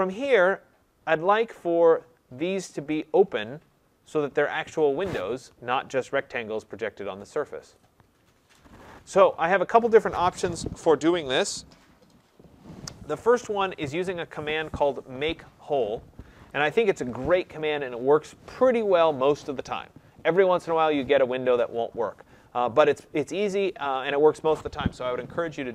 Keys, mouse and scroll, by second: 0.7-2.9 scroll, 4.0-4.8 scroll, 16.4 click, 20.6 click.